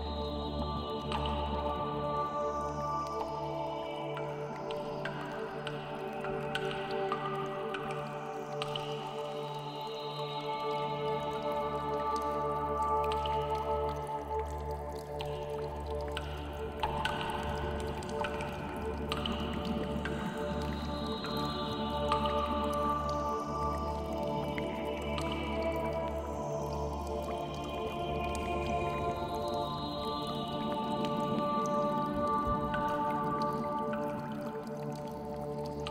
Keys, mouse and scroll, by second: 0.0 w, 1.6 scroll down 4, 1.8 middle click, 4.1 click, 4.3 click, 4.8 g, 5.3 right click, 5.5 click, 5.6 g, 6.2 right click, 6.3-6.7 scroll down 9, 6.7 shift+middle click, 7.0 scroll up 5, 7.2 shift+middle click, 9.4 click, 9.5 shift+click, 9.8 w, 11.2 KP_7, 11.8 shift+middle click, 12.1-12.8 scroll up 7, 12.8 g, 14.9 click, 15.0 middle click, 15.8 click, 16.0 shift+click, 16.5 w, 17.5 click, 17.6 shift+click, 18.1 w, 18.4 click, 18.6 middle click, 19.0 shift+middle click, 19.6 click, 20.1 g, 20.6 right click, 20.7-21.1 scroll down 8, 21.1 Tab, 21.4 middle click, 22.3 Tab, 23.1-23.5 scroll up 4, 23.2 shift+middle click, 24.0 click, 24.1 shift+click, 25.0 click, 25.5 g, 26.2 right click, 26.5 click, 27.2 g, 27.6 right click, 28.0 click, 28.1 shift+click, 28.5 w, 29.5 click, 29.7 shift+click, 30.0 w, 30.4 click, 30.6 shift+middle click, 31.1 click, 31.2 shift+click, 31.5 w, 31.9 click, 32.1 shift+middle click, 32.5 click, 32.7 shift+click, 33.0 w, 33.3 click, 33.8 click, 33.9 shift+click, 34.2 g, 34.9 right click, 35.0 middle click, 35.8 middle click.